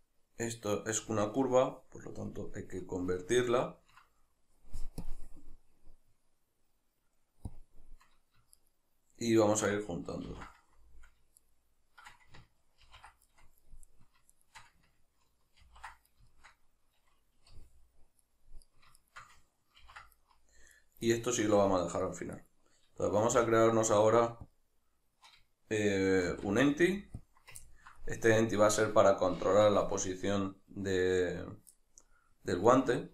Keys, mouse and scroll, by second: 2.3-3.6 drag, 3.6-5.0 ctrl+middle drag, 5.0-8.5 drag, 8.5 shift+right click, 10.3 ctrl+j, 11.4 shift+right click, 12.9 ctrl+j, 13.3-13.9 middle drag, 13.9 right click, 14.4 shift+right click, 15.7 ctrl+j, 16.3-18.4 shift+middle drag, 17.6 g, 18.6 right click, 19.0 shift+right click, 19.9 ctrl+j, 20.2-20.8 middle drag, 20.8 right click, 21.1-22.4 middle drag, 22.4 right click, 23.2 shift+s, 27.6-32.7 ctrl+middle drag, 32.7 right click.